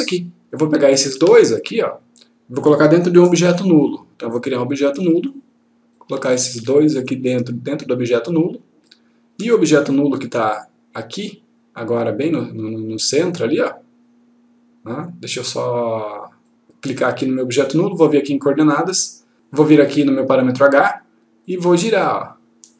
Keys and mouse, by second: 0.9 click, 1.4 shift+click, 4.2-5.4 click, 6.4 shift+click, 11.1-15.2 click, 16.9 click, 18.7 click, 21.4-22.7 click.